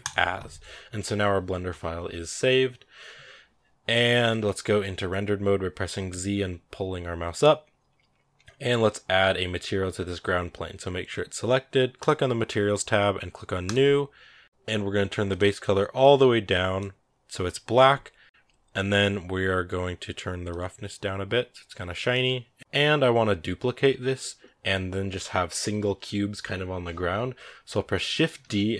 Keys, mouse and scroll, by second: 0.0 click, 4.1 scroll up 1, 6.1 z, 11.8-14.4 drag, 15.1 click, 20.4-22.6 drag, 22.6 right click, 28.3 shift+d.